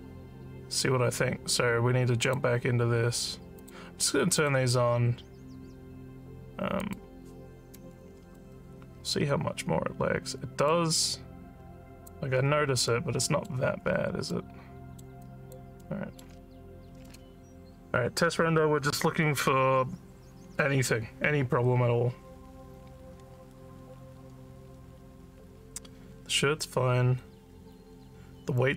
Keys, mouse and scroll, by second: 2.2 click, 3.6 click, 4.4 click, 6.8 click, 8.4-10.7 alt+middle drag, 10.9-12.1 alt+drag, 12.9 alt+middle click, 13.9 scroll up 2, 14.3 alt+middle click, 15.2 alt+click, 15.8 alt+middle click.